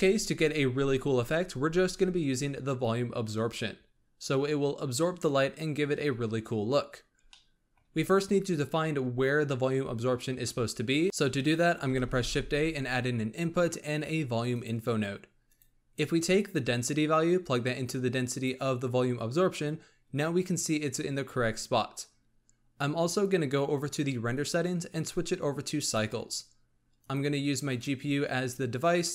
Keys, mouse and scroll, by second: 7.2-8.0 middle drag, 8.0-11.0 scroll down 1, 11.9 shift+a, 16.3-19.3 drag, 23.6 click, 24.8-29.1 drag.